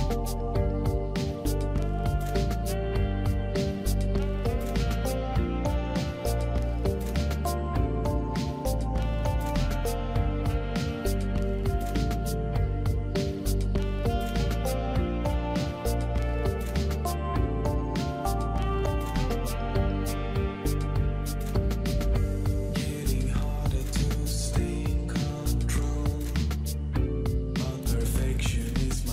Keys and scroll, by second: 14.0 ctrl+v, 15.3 Return, 17.0 Return, 20.1 ctrl+v, 22.1 Return, 23.1 Return, 27.9 2, 28.4 Return.